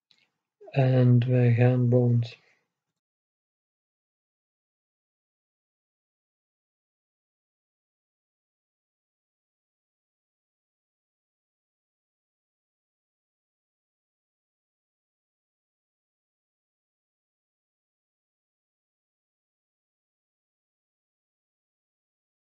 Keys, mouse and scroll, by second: 0.3-2.2 drag, 3.4-5.3 right drag, 5.3-7.3 drag, 11.9-15.0 right drag, 13.0-15.0 drag, 16.6-19.6 right drag, 17.6-19.6 drag, 21.9-22.5 middle drag.